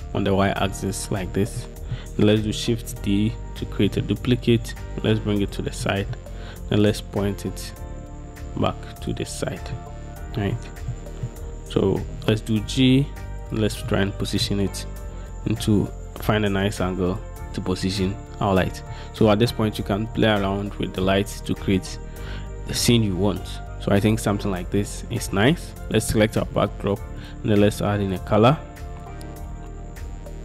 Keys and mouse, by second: 1.7-2.1 middle drag, 3.0 shift+d, 9.9-10.7 middle drag, 11.1 middle click, 12.3 g, 14.0 middle click, 19.8-21.2 middle drag, 25.0 middle click.